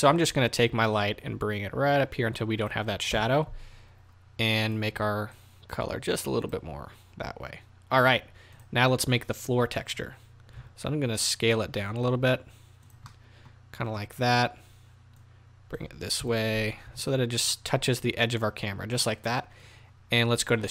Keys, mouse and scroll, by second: 1.0-5.3 drag, 3.1 KP_0, 7.4-8.6 scroll up 2, 8.6 click, 10.6 s, 13.1-14.2 middle drag, 14.2-15.2 scroll down 2, 14.3-15.2 middle drag, 15.2-18.6 drag, 16.2 KP_0, 16.9 s.